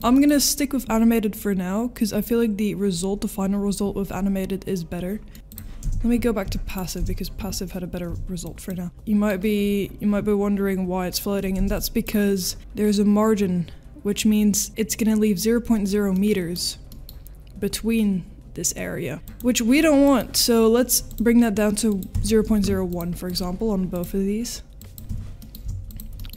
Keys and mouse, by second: 5.3 click, 5.3 space, 5.8 space, 8.9-9.3 middle drag, 8.9 space, 11.6 space, 16.2-16.5 middle drag, 16.9 middle drag, 19.2 space, 20.1 middle click, 21.1-23.0 drag, 23.3 click, 23.9-25.9 drag, 26.2 middle click.